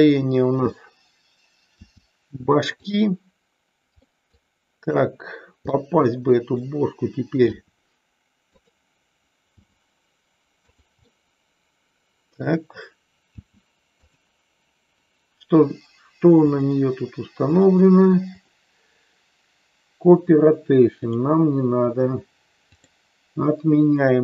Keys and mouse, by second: 1.8 r, 2.8 click, 4.0 middle click, 5.7-6.6 middle drag, 7.5 r, 8.5 click, 9.6 g, 10.6 click, 11.1-12.5 middle drag, 13.3 g, 16.3 click, 21.0 click, 22.7 click, 23.8-24.2 middle drag.